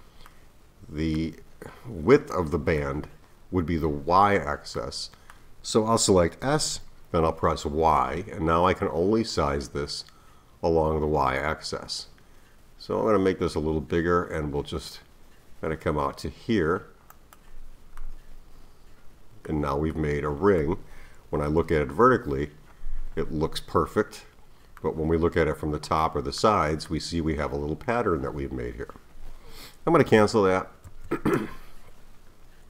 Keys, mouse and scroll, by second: 0.3-1.7 middle drag, 1.7-2.3 scroll down 2, 2.3-6.4 middle drag, 6.4 s, 18.0-21.6 middle drag, 21.6 KP_1, 24.8-29.4 middle drag, 30.9 z.